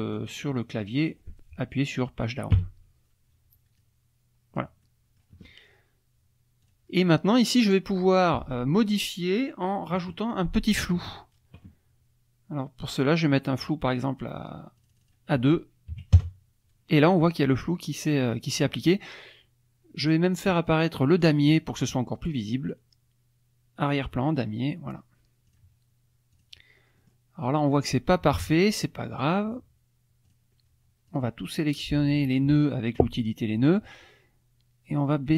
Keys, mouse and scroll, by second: 0.1 click, 2.5 End, 3.8-4.8 drag, 6.6 click, 7.3 click, 14.8 click, 15.9 KP_2, 16.1 KP_Enter, 20.0 click, 21.2 click, 23.9 click, 25.5 click, 26.3 click, 27.0 middle click, 27.0-27.3 scroll down 2, 27.4 middle click, 28.3 KP_Subtract, 28.9 middle click, 28.9-29.4 scroll down 2, 30.3 click, 31.1 click, 35.0-35.3 drag.